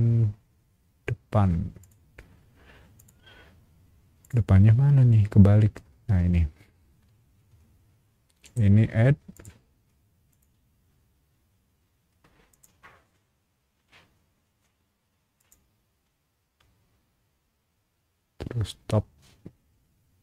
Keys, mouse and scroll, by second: 1.8 click, 2.9 click, 4.2 click, 8.4 right click, 9.3 click, 10.3 click, 12.5 click, 15.4 click.